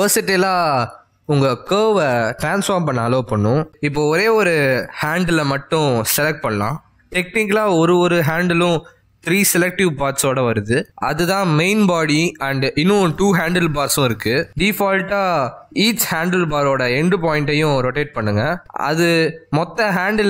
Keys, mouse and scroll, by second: 5.1 r, 9.3 click, 12.8 click, 13.9 click, 14.9 click, 16.1 click, 16.9 click, 18.1 click, 19.9 click.